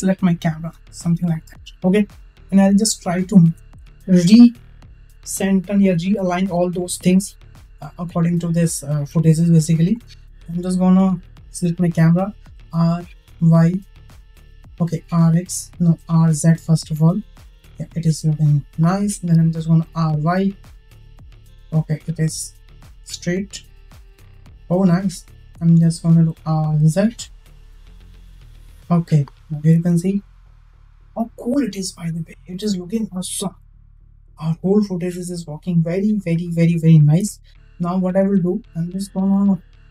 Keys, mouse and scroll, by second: 1.0 click, 2.9 shift+middle click, 9.6-10.1 shift+middle drag, 12.4 r, 19.6 r, 26.1 r, 29.4 space, 37.0 space, 37.9 click, 38.3-38.7 middle drag.